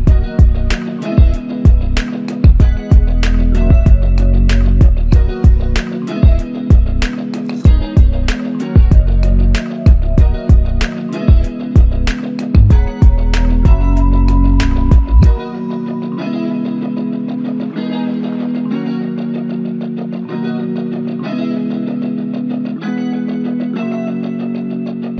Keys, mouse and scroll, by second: 7.2 double click, 13.2 alt+click, 15.0 shift+click, 17.5 alt+click, 19.2 typing, 20.6 typing, 24.2 double click.